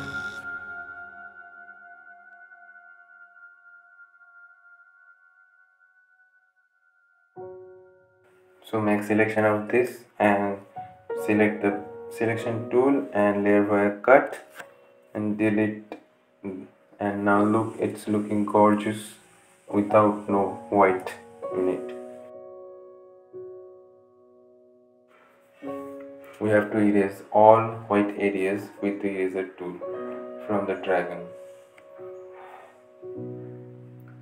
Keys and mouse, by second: 8.1 click, 8.4 right click, 9.6 click, 13.2 click, 13.9 right click, 15.4 click, 20.7 click, 20.9 right click, 21.3 click, 21.8 right click, 22.3-24.4 drag, 25.0 right click, 25.6-34.2 drag, 33.6 typing.